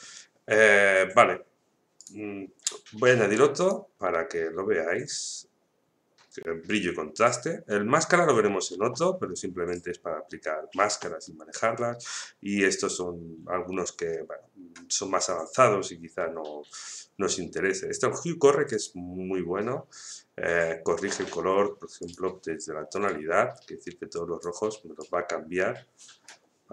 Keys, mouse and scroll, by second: 18.7 click, 22.0-26.7 drag.